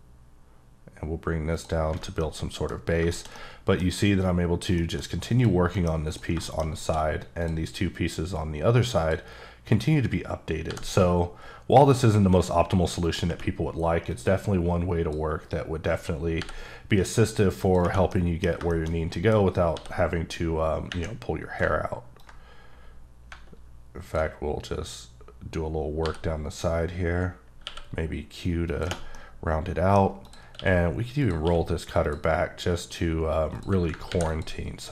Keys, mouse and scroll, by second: 1.5 click, 1.9 scroll down 1, 2.2 middle click, 2.8 scroll down 3, 3.1 shift+middle click, 3.8 scroll up 1, 4.8 middle click, 5.0 scroll up 1, 5.4 click, 5.7 middle click, 6.1 click, 6.4 middle click, 6.7 scroll up 1, 6.8 d, 7.4 click, 8.3 click, 10.6 b, 11.7-12.3 scroll up 4, 13.0 click, 14.1 click, 16.4 b, 17.6 click, 18.1 middle click, 18.7 shift+middle click, 18.9 shift+scroll down 2, 19.1 middle click, 19.3 scroll up 2, 19.7 d, 22.1 ctrl+click, 26.0 b, 27.6 q, 28.6 click, 29.1 middle click, 30.0 scroll up 1, 30.2 click, 30.5 q, 31.2 click, 31.4 q, 32.0 click, 32.3-33.5 scroll down 4, 33.5 click, 34.1 ctrl+r, 34.3 click.